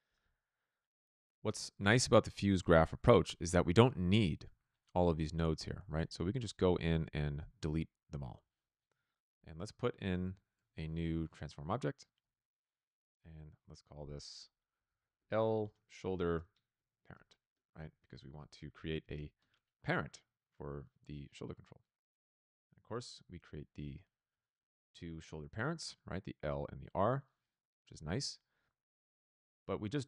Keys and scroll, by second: 0.1 f, 7.3 Delete, 8.8 Tab, 9.0-11.0 typing, 12.1 f, 14.7-19.6 typing.